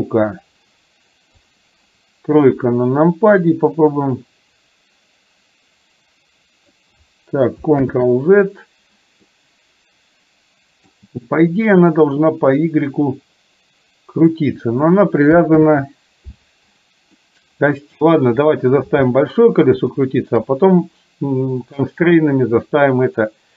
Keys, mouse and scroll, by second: 1.5 click, 2.6 KP_3, 3.7-6.8 drag, 7.8 ctrl+z, 9.3-11.0 middle drag, 12.6-14.6 drag, 15.6 ctrl+z, 17.2-18.1 middle drag, 18.6 click, 20.0-20.5 shift+middle drag.